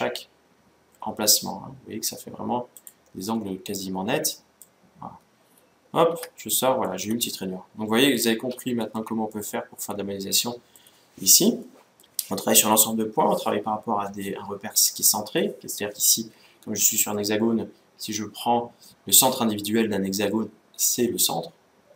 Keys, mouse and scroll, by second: 3.1-4.7 middle drag, 5.0 scroll down 1, 5.2-10.8 middle drag, 6.0 Tab, 11.5-13.1 middle drag, 18.8-20.6 drag.